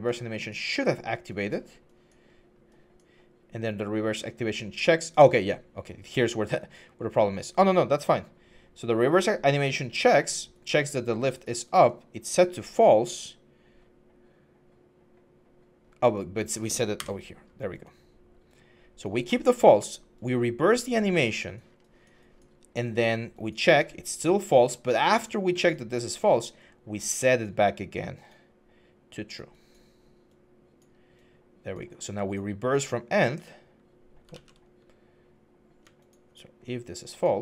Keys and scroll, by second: 16.7 Delete, 34.1 ctrl+z.